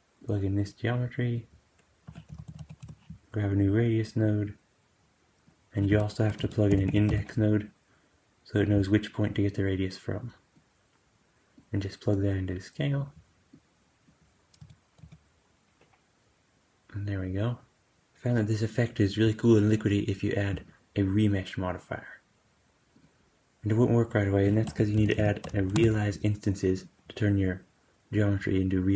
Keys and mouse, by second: 0.1-3.5 drag, 1.9 q, 4.4-8.6 drag, 5.8 q, 9.4-26.8 drag, 14.5 space, 14.9 g, 24.6 q, 28.3-28.9 drag.